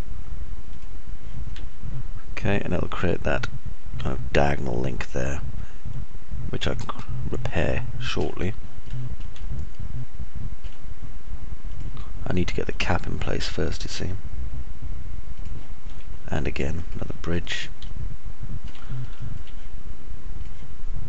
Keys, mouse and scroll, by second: 2.3-9.0 alt+middle drag, 7.2-9.0 alt+drag, 7.2-9.0 alt+right drag, 9.7 click, 9.7 middle click, 9.7 right click, 10.2-11.3 alt+middle drag, 10.7 alt+click, 10.7 alt+right click, 14.7 ctrl+z, 18.8 alt+click, 18.8-19.8 alt+middle drag, 18.8 alt+right click, 20.0 alt+click, 20.0 alt+middle click, 20.0 alt+right click.